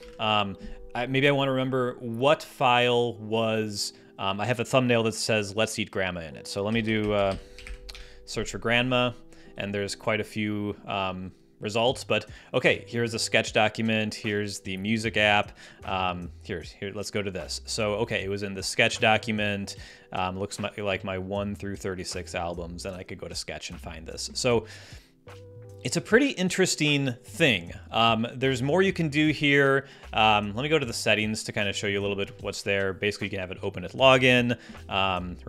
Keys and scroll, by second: 6.4-8.0 typing.